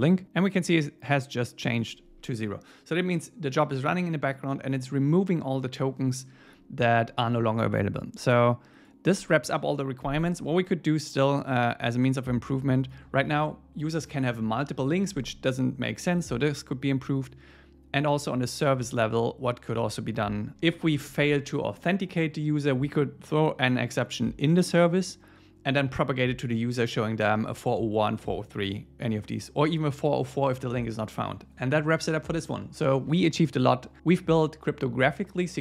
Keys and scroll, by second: 21.1 shift+super+Left.